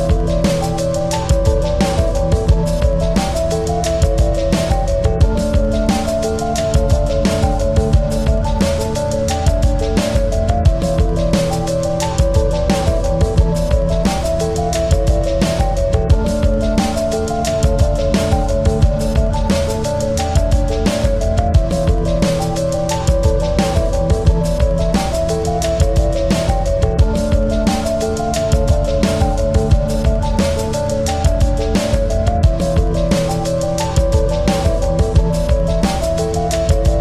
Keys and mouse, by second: 0.6-2.8 shift+drag, 3.0 click, 4.7 ctrl+=, 5.2 space, 5.6 click, 6.9 space, 7.6 ctrl+=, 8.0 space, 11.3 click, 13.8 shift+x, 14.4 ctrl+a, 15.7 ctrl+a, 16.1 ctrl+t, 17.4 click, 20.7 click, 22.3 click, 26.7-30.5 drag, 32.3-34.4 alt+drag, 34.4-35.9 drag.